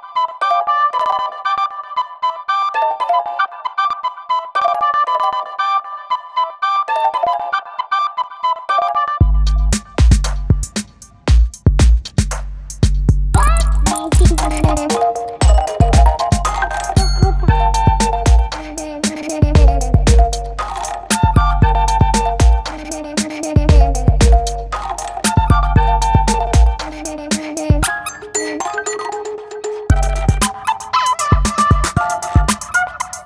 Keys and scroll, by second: 1.5 0, 4.1-11.6 typing, 12.7 space, 13.5 [, 17.2 ], 18.3 ], 19.4 ], 20.1 [, 21.4 ], 22.5 ], 24.1 v, 25.0 super+m, 28.0 Return, 29.2 super+m.